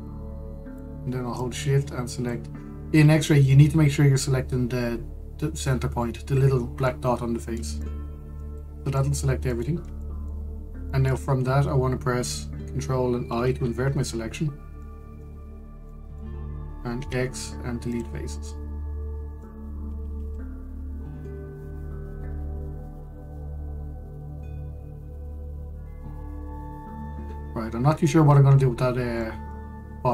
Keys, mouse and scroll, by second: 0.7 shift+click, 2.0 shift+click, 7.1-7.5 scroll, 7.5-11.2 middle drag, 11.2-11.6 scroll down 1, 11.6 shift+middle click, 11.9 scroll up 1, 14.0 ctrl+i, 15.5 middle click, 16.0 scroll up 1, 16.6-17.6 middle drag, 17.6 x, 19.1-20.7 middle drag, 20.7-21.9 scroll down 2, 21.9-25.0 middle drag, 29.9 middle click.